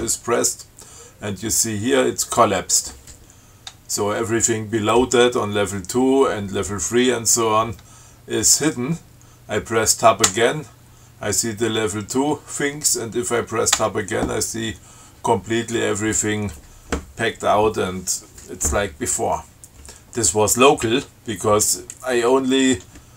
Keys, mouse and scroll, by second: 10.5 Tab, 14.0 Tab.